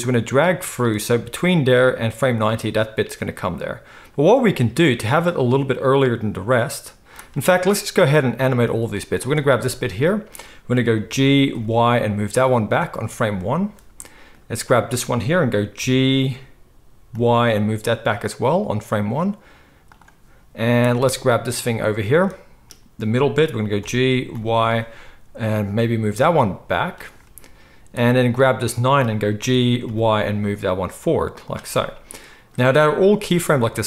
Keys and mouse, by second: 0.0-9.3 drag, 9.3-14.7 middle drag, 11.0 g, 14.7 click, 14.8-17.6 middle drag, 15.8 g, 23.8 g, 24.8-33.8 middle drag, 29.4 g.